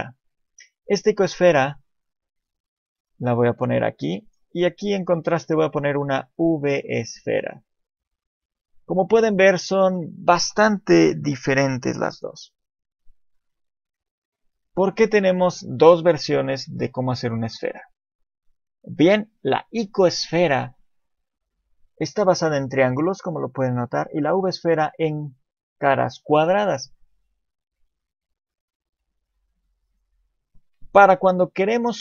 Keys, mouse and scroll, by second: 1.9 click, 4.2 right click, 5.3 shift+a, 7.2 shift+middle click, 7.8 click, 8.5 click, 9.3-9.9 scroll up 2, 9.6 shift+middle click, 13.2 shift+middle click, 13.2-15.3 scroll down 1, 19.8 click, 24.2 click, 27.4 click, 29.9 click, 31.1 click.